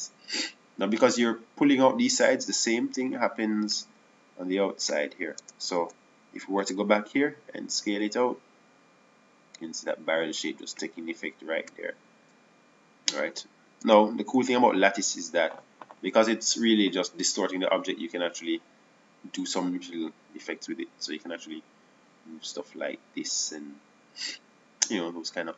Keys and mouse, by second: 7.4 Tab, 7.8 Tab, 8.2 Tab, 10.2 s, 13.6 KP_1, 17.2 Tab, 17.2-19.3 drag, 20.8-23.2 drag.